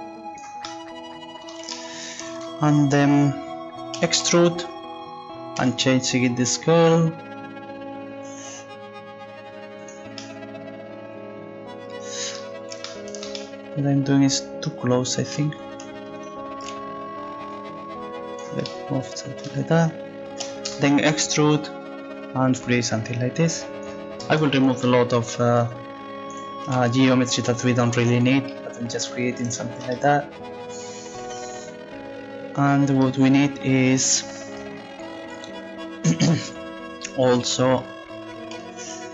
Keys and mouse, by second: 4.0 e, 5.6 s, 12.6 middle click, 16.2-17.7 right drag, 17.5 click, 18.1-19.6 right drag, 18.9 click, 20.4 e, 21.5 middle click, 22.1-23.7 drag, 25.6-28.2 right drag, 27.2 click, 28.5 click, 28.5 right click, 37.3 z, 38.8-39.1 drag.